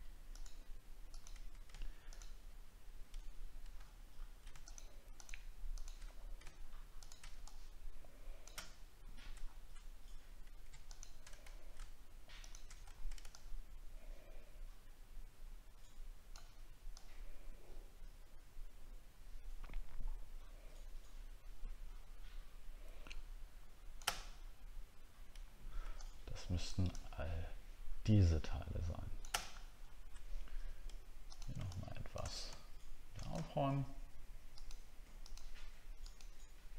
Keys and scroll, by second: 3.8 alt+scroll up 1, 6.1 alt+scroll up 1, 9.4 alt+scroll down 1, 11.4 alt+scroll up 1, 12.8 alt+scroll down 1, 29.5 alt+scroll up 4.